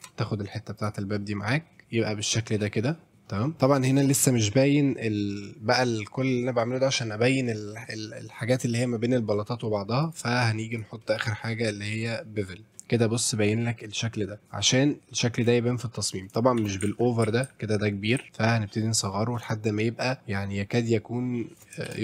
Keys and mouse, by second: 0.8 click, 1.1-3.1 middle drag, 4.0 middle drag, 10.0 click, 10.7 click, 11.1-12.5 drag, 12.9-13.7 middle drag, 13.7-14.4 middle drag, 15.6 shift+middle drag, 16.6 shift+f, 16.9 w, 16.9 alt+d, 17.5 alt+q, 18.2 alt+s, 19.0 click, 19.5-21.6 shift+drag, 21.6 middle click, 21.9 shift+f.